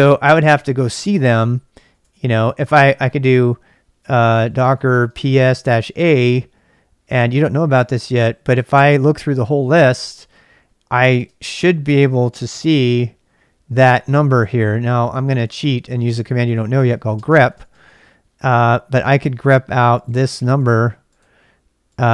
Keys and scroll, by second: 1.3-6.1 typing, 8.5-11.1 typing, 12.4 typing, 14.3 Return, 14.3-18.1 typing.